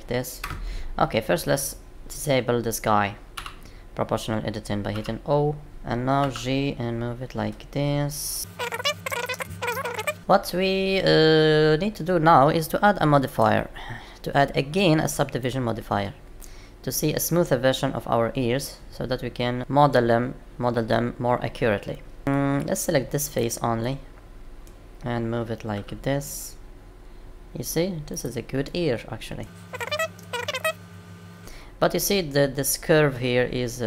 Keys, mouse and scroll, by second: 3.3 o, 4.9 o, 6.1 g, 8.6 click, 9.1 ctrl+click, 9.6 g, 10.2 shift+middle click, 13.2 click, 17.3 middle click, 22.2 middle click, 23.2 click, 23.8 middle click, 25.7 g, 28.6 middle click, 29.6 click, 29.7 middle click, 30.1 g.